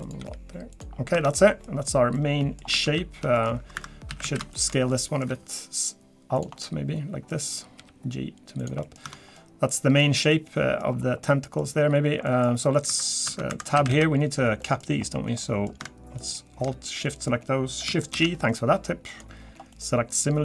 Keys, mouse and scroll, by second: 0.2 g, 0.9 scroll down 3, 1.1 Tab, 1.3 middle click, 1.7-2.1 scroll down 1, 2.1 middle click, 2.8 ctrl+z, 3.3 middle click, 3.7 2, 4.1 a, 4.2 a, 4.5 alt+shift+click, 4.9 middle click, 5.3 s, 6.6 middle click, 7.8 g, 8.8 middle click, 9.0 Tab, 9.3 scroll down 1, 9.3 middle click, 10.0 scroll down 2, 10.3 middle click, 10.8-11.2 scroll up 4, 11.2 middle click, 12.0 scroll down 1, 12.3 middle click, 12.8 2, 13.1 click, 13.3 Tab, 13.5 2, 13.8 a, 13.9 a, 14.6 middle click, 14.9 scroll up 1, 15.4 middle click, 16.2 alt+shift+click, 17.0 middle click, 18.1 shift+g, 19.4-19.7 scroll down 2, 19.7 middle click.